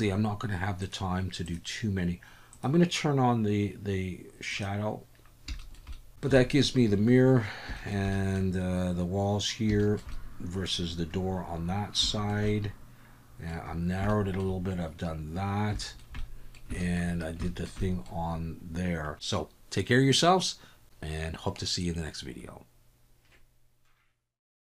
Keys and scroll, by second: 5.9 ctrl+s.